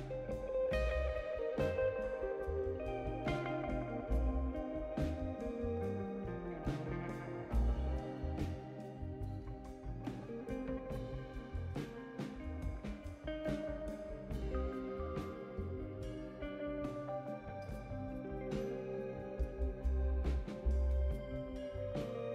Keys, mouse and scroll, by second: 1.4 click, 2.8 click, 9.6 click, 11.8 click, 13.1 click, 14.3 click, 16.5 click, 17.9 click, 19.8 click, 21.3 click.